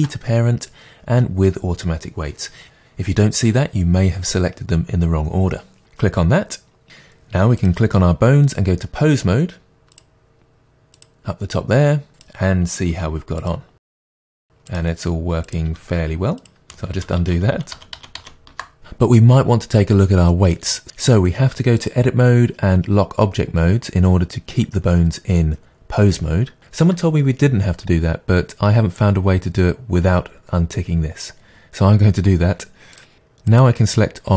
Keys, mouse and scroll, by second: 7.6 click, 9.9-12.2 drag, 12.9 r, 13.8 click, 13.9 r, 14.5 r, 15.3 click, 15.5 r, 16.9 ctrl+z, 21.8-33.6 drag.